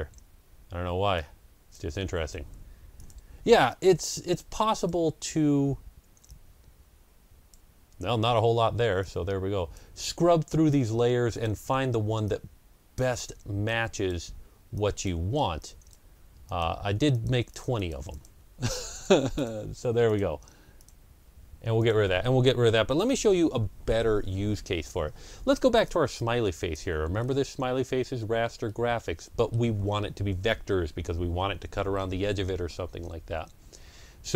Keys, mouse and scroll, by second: 3.2 Delete, 3.6-15.0 drag, 4.9 Delete, 7.9 Delete, 9.8 Delete, 11.5 Delete, 13.0 Delete, 14.2 Delete, 15.0 Delete, 15.5 click, 15.9 Delete, 16.8 Delete, 17.0 click, 17.4 click, 17.6 Delete, 17.6 click, 18.0 click, 18.4 Delete, 18.8 click, 19.1 Delete, 19.2 click, 19.6 Delete, 19.9 click, 20.7 click, 21.0 Delete, 21.6 click, 23.1 Delete, 25.7-27.8 drag, 27.0 ctrl+scroll up 1, 27.8 ctrl+scroll down 1, 28.5-31.8 middle drag.